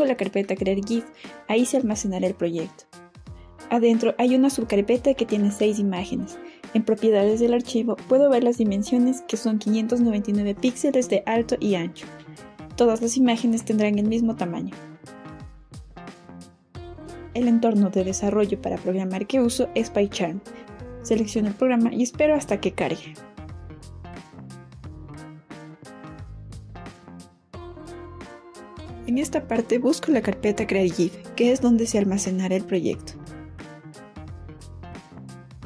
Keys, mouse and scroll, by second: 1.0 click, 2.8 click, 4.0 click, 4.3 right click, 6.0 click, 7.2 click, 9.8 click, 11.8 click, 13.7 click, 26.3 click, 29.8 click, 32.0 click, 32.7 click, 34.3 click.